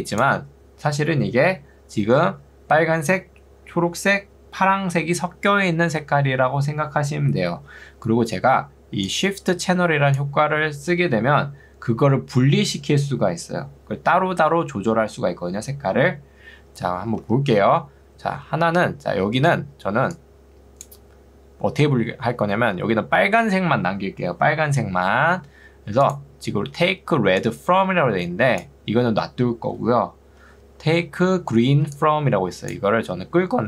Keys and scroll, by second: 17.2 Escape, 19.4 ctrl+2, 25.2 Escape, 26.8 ctrl+2, 30.4 Escape, 30.8 ctrl+2, 31.8 ctrl+2, 33.0 Escape.